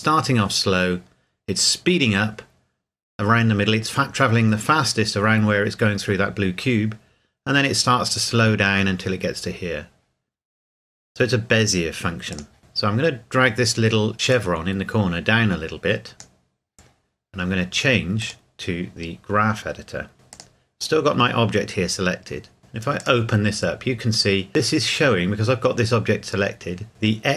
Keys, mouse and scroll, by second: 12.3 click, 12.4 click, 14.3 click, 20.3 click, 23.0 click.